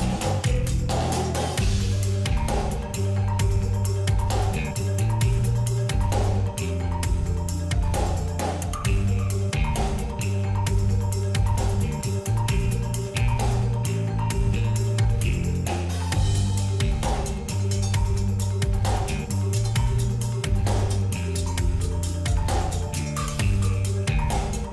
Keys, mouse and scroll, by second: 2.9-5.7 drag, 6.7 click, 8.2 ctrl+z, 9.2 click, 11.0 ctrl+z, 11.4-11.9 alt+scroll up 2, 12.1 alt+scroll down 1, 13.0-23.0 drag, 23.0 space, 23.2 click, 23.5 space, 24.5-24.7 drag.